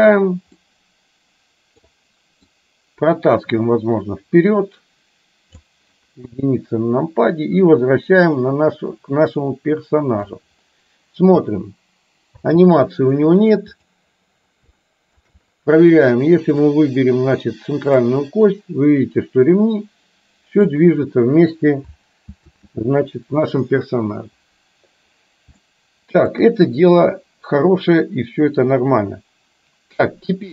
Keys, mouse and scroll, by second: 0.7-2.6 middle drag, 3.4-5.7 drag, 6.2 KP_1, 7.7-10.4 drag, 11.5 space, 12.5 space, 13.9 click, 14.9-15.2 shift+middle drag, 18.4-20.9 drag, 22.5 ctrl+z, 25.7-26.4 shift+middle drag.